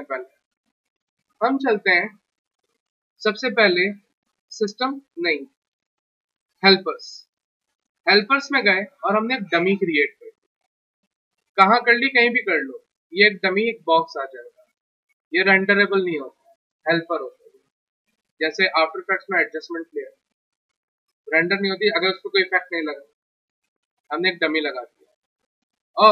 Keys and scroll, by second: 14.6 w.